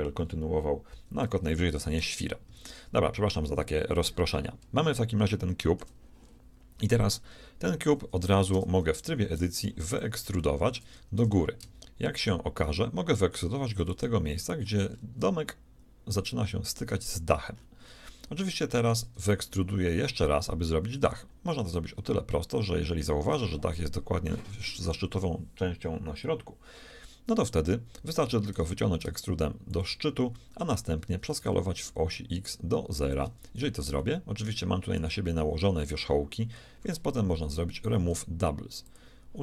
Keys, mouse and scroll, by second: 2.4 z, 3.2-4.0 scroll up 1, 7.9 Tab, 8.5 Tab, 9.0 a, 9.4 b, 10.4-12.5 shift+drag, 11.2 shift+e, 14.2-18.1 middle drag, 28.5 e, 31.2 s, 34.0-35.9 middle drag, 37.6 w.